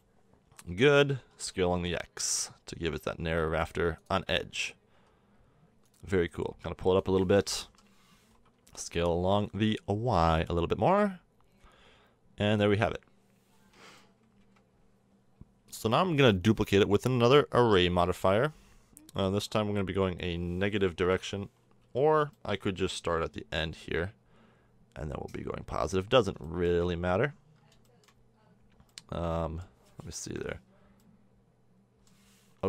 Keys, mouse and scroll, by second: 0.2-0.8 middle drag, 1.3 s, 4.9 s, 7.7 KP_3, 8.6 s, 12.8-13.5 middle drag, 14.4 KP_1, 21.4-25.2 drag, 21.8 z, 23.6 g, 26.1 click, 30.2 KP_1.